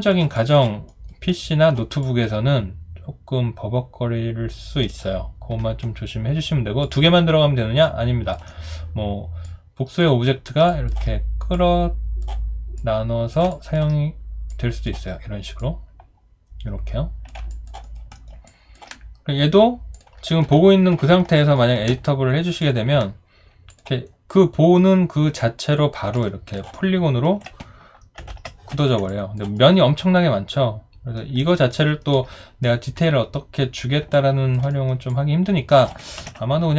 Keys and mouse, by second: 0.3 alt+click, 0.9 alt+right click, 1.3 alt+middle click, 2.0 alt+click, 10.7 alt+click, 13.5 alt+click, 17.5 alt+click, 17.8 alt+right click, 18.1 alt+middle click, 18.5 alt+click, 21.3 alt+middle click, 21.5 alt+right click, 26.1 alt+click, 26.7 alt+right click, 27.9-28.9 typing, 29.1 alt+click, 29.6 alt+right click, 31.4 alt+middle click, 31.7 alt+right click, 34.1 alt+click, 34.7 alt+right click, 35.1 alt+click, 36.2 ctrl+z.